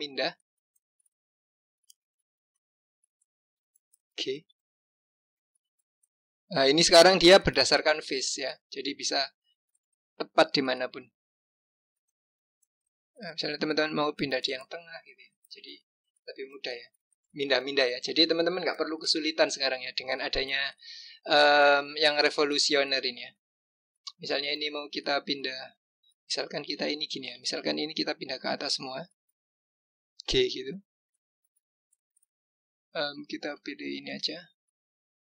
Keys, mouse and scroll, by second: 1.9 click, 2.9-4.3 scroll up 2, 4.3 g, 8.3-11.1 drag, 11.1 g, 15.7 click, 16.7-17.4 scroll down 3, 18.0 click, 19.4 click, 23.1 click, 26.5 click, 27.5 shift+click, 28.2 shift+click, 30.1 g.